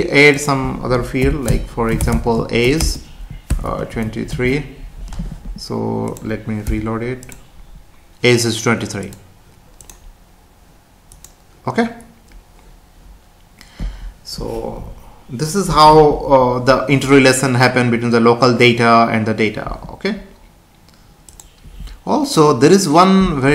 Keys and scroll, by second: 1.5 Return, 2.8 space, 4.3 ctrl+s, 6.7 F5.